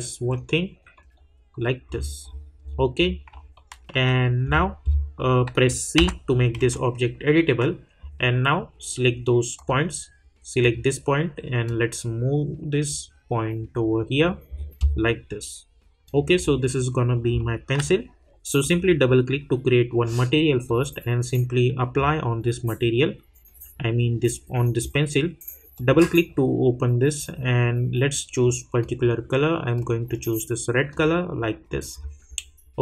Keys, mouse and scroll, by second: 0.9 middle click, 1.9 scroll down 1, 3.5 alt+middle click, 4.4 scroll up 1, 5.9 c, 9.5-14.1 drag, 14.1 scroll down 1, 16.0 click, 16.9 alt+drag, 17.7 alt+middle click, 18.6-24.4 drag, 25.7 click, 28.1 click, 31.6 scroll up 1.